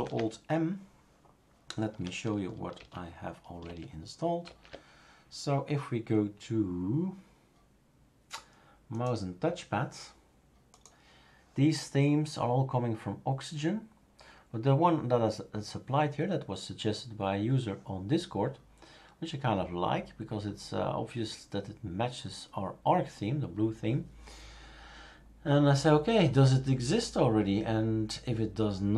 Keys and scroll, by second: 2.8 shift+super+q, 3.6 shift+super+q, 4.4 shift+super+q.